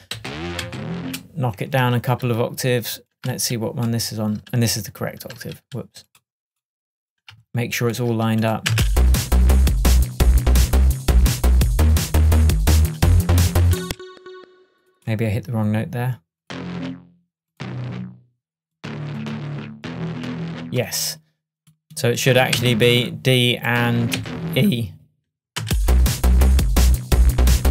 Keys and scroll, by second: 0.0 shift+super+a, 6.3 super+z, 13.9 space, 22.6 Down, 24.2 Down, 25.7 space.